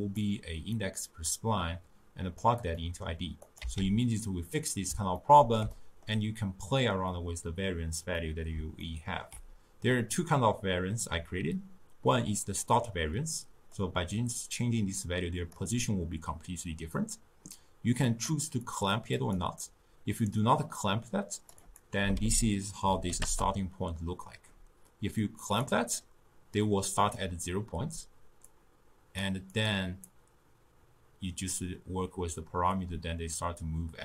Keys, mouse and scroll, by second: 0.2-2.8 drag, 2.8-3.5 middle drag, 3.5 click, 3.6 x, 5.2-12.0 ctrl+middle drag, 13.8-16.8 drag, 18.1 click, 18.7 click, 19.2 click, 20.8-24.7 drag, 25.5 click, 28.5-29.7 drag, 30.1-33.2 drag.